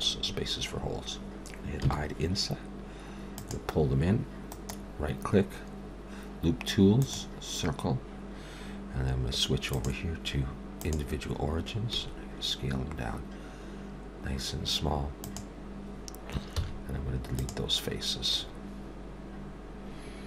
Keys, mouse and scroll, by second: 1.8 i, 4.5 right click, 9.7 click, 12.0 s, 16.6 x.